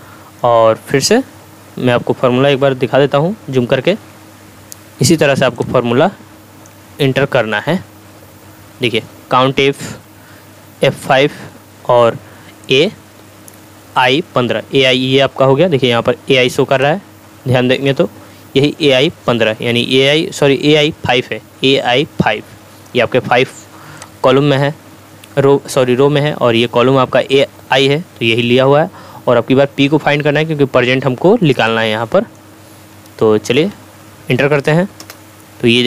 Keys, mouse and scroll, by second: 3.9 2, 5.6-6.8 ctrl+drag, 7.8 scroll up 1, 16.8-18.0 drag, 24.0-24.6 drag, 31.6-32.6 drag, 35.0 Return.